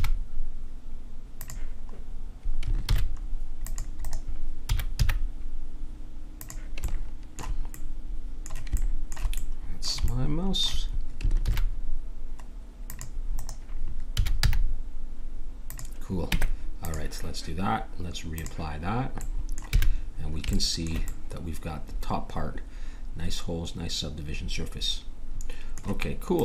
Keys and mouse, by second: 2.9 ctrl+r, 4.7 s, 6.8-8.4 middle drag, 9.4 middle click, 10.1 middle click, 11.4 ctrl+r, 14.1 s, 16.3 Tab, 18.8-20.2 drag, 19.8 a, 26.3-26.4 drag.